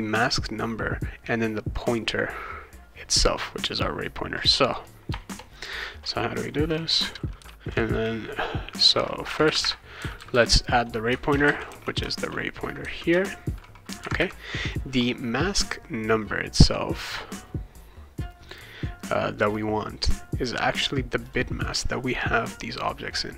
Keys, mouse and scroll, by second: 5.1 BackSpace, 5.3 BackSpace, 7.0 Return, 7.4 Return, 11.0-12.7 typing, 13.1 Return, 21.2 click, 22.7 click.